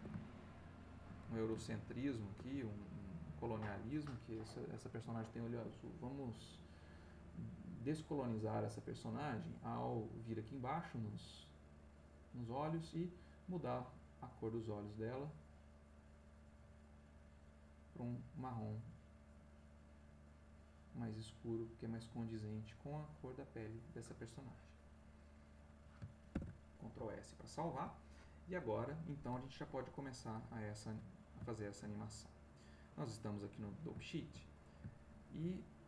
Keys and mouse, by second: 1.7 ctrl+click, 1.7 ctrl+middle click, 2.6 ctrl+shift+middle click, 6.0 click, 7.2 click, 8.2 click, 8.7 click, 12.3 click, 13.6-15.2 drag, 15.5-17.5 drag, 17.9-21.1 drag, 22.0-24.0 drag, 26.3 ctrl+s, 27.2 shift+middle click, 27.5 shift+click, 31.1-32.3 ctrl+drag, 32.4 ctrl+click, 32.4 ctrl+middle click, 33.5 click, 34.0 ctrl+click, 34.5 ctrl+click, 35.6 ctrl+click.